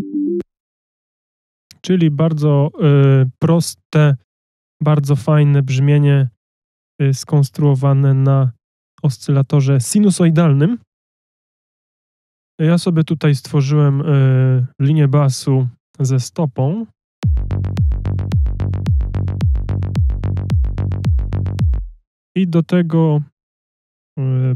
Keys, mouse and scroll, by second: 17.8 click, 17.8 space, 18.8 click, 21.8 click, 22.1 space.